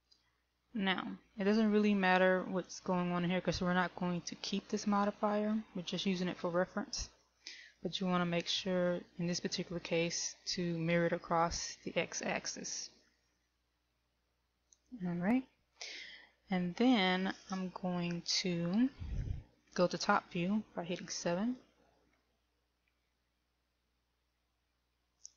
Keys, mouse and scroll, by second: 22.4 KP_7, 23.7 scroll up 3.